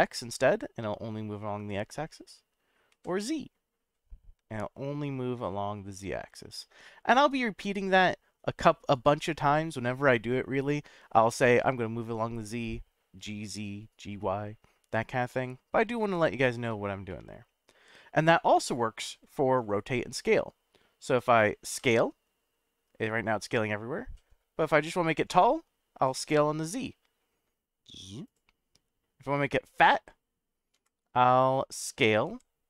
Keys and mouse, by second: 2.9 z, 8.9 right click, 11.6-13.0 middle drag, 17.2-18.0 middle drag, 18.3 middle click, 21.7 s, 26.2 z, 28.2 click, 30.7 s, 32.3 y.